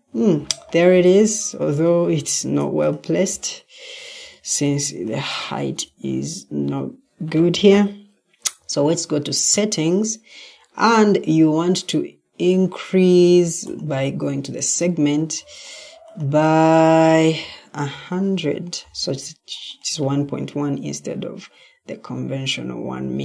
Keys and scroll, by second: 1.9 Escape, 4.1 Escape, 5.5 Escape, 6.4 Escape, 7.5 ctrl+t.